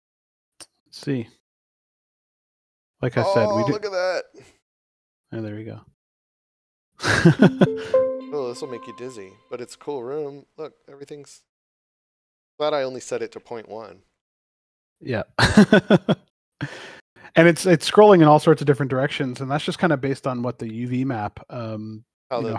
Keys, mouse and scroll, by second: 3.6 click, 20.1 w, 22.3 a.